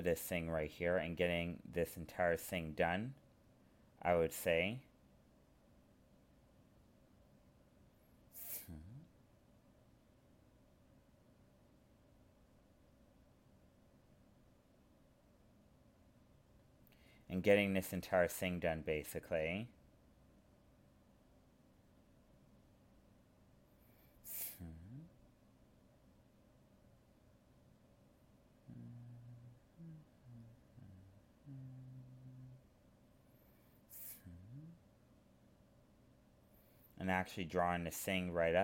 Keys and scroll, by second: 0.4 alt+space, 2.4 alt+space, 3.8 alt+space, 5.4 alt+space, 7.2 alt+space, 8.2 alt+space, 12.4 alt+space, 16.7 alt+space, 19.0 alt+space, 22.0 ctrl+z, 25.0 ctrl+z, 30.4 ctrl+z, 31.3 alt+space, 33.6 alt+space.